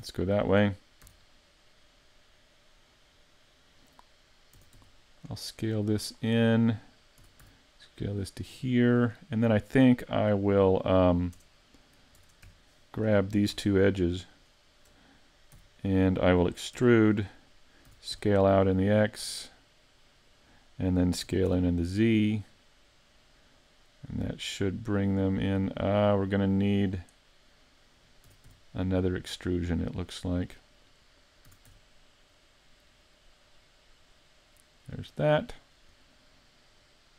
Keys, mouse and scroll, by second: 1.1 z, 4.6 s, 6.2 click, 7.2 s, 8.9 click, 11.4 Tab, 12.2 ctrl+Tab, 12.8 right click, 14.3 shift+right click, 15.6 z, 16.8 e, 17.1 click, 17.9 s, 20.4 click, 26.9 click, 28.3 s, 31.0 click, 31.5 s, 35.0 s, 35.2 click.